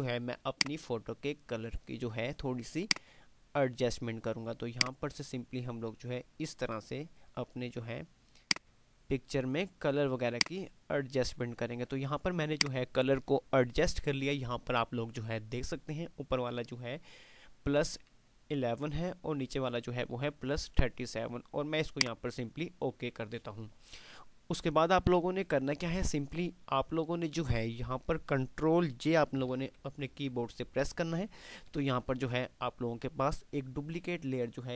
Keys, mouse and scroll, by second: 0.0 F5, 0.7-1.6 drag, 12.9-13.4 click, 22.0 click, 29.4 click, 29.6 j.